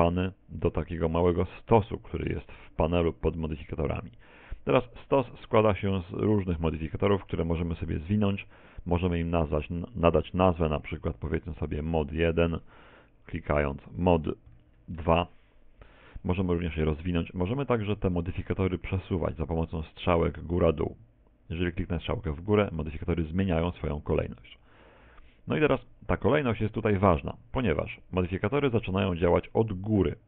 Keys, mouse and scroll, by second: 5.3 click, 5.9 click, 9.6 click, 13.6 click, 21.8 click, 24.3 click, 25.9 click, 28.0 click.